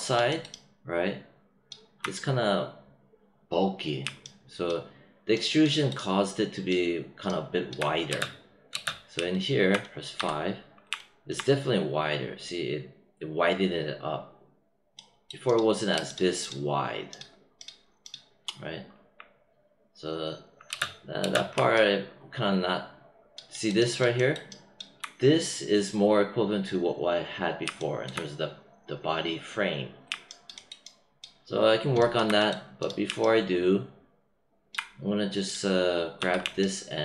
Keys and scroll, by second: 8.0 space, 10.1 5, 20.6 space, 36.1 w.